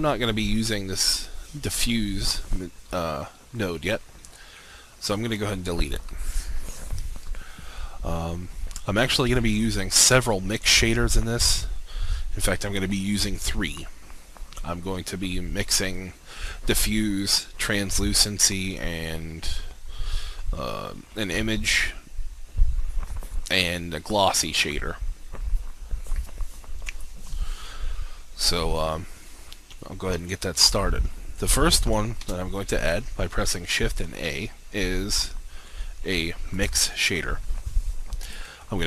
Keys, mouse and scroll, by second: 0.5 x, 32.2 shift+a, 36.5 click.